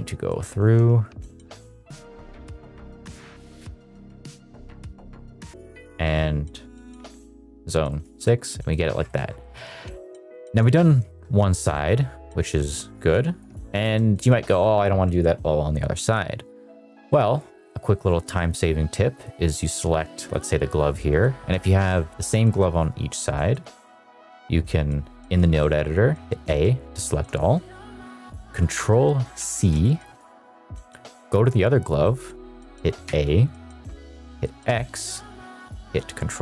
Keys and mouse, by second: 0.3 ctrl+v, 1.9 click, 2.1 middle click, 2.3 ctrl+v, 2.4 middle click, 2.5 click, 2.7 click, 2.8 middle click, 2.8 middle click, 2.9 middle click, 3.2 middle click, 3.5 ctrl+v, 3.6 ctrl+v, 3.7 ctrl+v, 3.8 click, 3.9 click, 4.0 click, 4.2 click, 4.3 click, 4.6 middle click, 4.7 click, 4.9 ctrl+c, 5.2 ctrl+v, 5.4 click, 7.8 middle click, 8.1 shift+middle drag, 8.6 middle drag, 9.0-9.4 shift+middle drag, 9.7 ctrl+s, 10.1 middle drag, 11.0 middle drag, 11.6 middle drag, 13.1 click, 13.7 shift+middle drag, 17.7 middle click, 18.3 middle click, 19.1 click, 20.1 shift+middle click, 21.7 click, 22.6 click, 23.7 click, 26.4 a, 29.3 ctrl+c, 31.1 click, 33.0 a, 34.7 x.